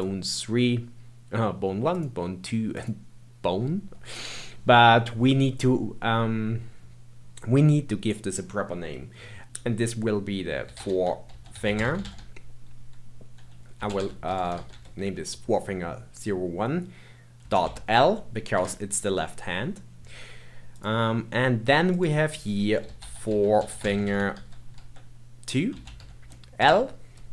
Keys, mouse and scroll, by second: 1.9 click, 2.7 click, 4.2-7.3 scroll up 2, 8.1-9.4 middle drag, 14.4 BackSpace, 20.7 click, 21.9-25.0 drag.